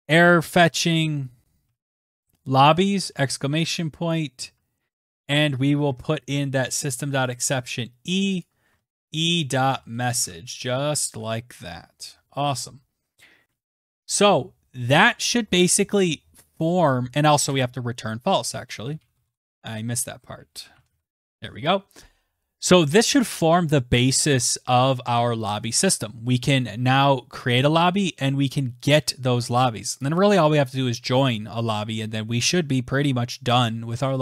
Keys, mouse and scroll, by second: 0.0-1.9 typing, 2.9 Right, 4.4 click, 4.4-8.2 typing, 5.4 click, 9.4-11.2 typing, 10.2 click, 14.5 Return, 15.6-18.4 typing, 22.3-22.9 scroll, 23.0-23.9 scroll, 24.8 click, 25.0-25.4 scroll, 27.0 click.